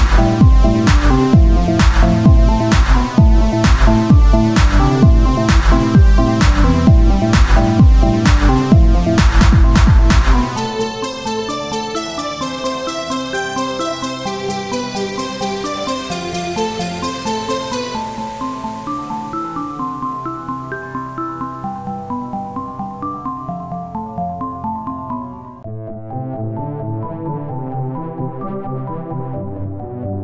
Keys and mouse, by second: 0.0 ctrl+z, 1.0 s, 3.2-4.3 drag, 5.2 Tab, 7.6 shift+d, 9.2-12.5 drag, 16.8 Tab, 19.0-20.2 drag, 20.3 click, 20.7 Tab, 24.1 Tab, 25.8-30.2 right drag.